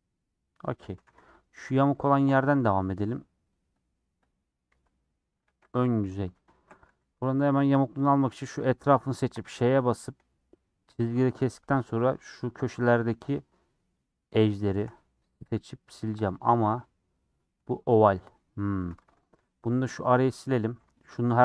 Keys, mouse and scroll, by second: 0.0-1.1 scroll down 1, 1.1 3, 1.4 Left, 2.3 l, 4.3 Left, 4.7 l, 5.2 middle click, 5.6 scroll up 1, 5.7 middle click, 6.2-6.9 typing, 6.3-6.9 scroll up 3, 6.5 shift+middle click, 7.7 alt+click, 8.1 alt+click, 8.4-8.7 scroll down 4, 8.7 middle click, 9.3 ;, 10.0 middle click, 10.3 scroll up 2, 11.0 shift+middle click, 11.3 scroll up 2, 12.1 click, 12.5 middle click, 13.0 scroll down 2, 14.0 shift+click, 14.3-16.1 shift+middle drag, 16.1 shift+click, 16.3 middle click, 16.4 scroll up 4, 16.9 middle click, 17.6 Tab, 18.5 Tab, 19.6 middle click, 20.6 click, 21.2 middle click.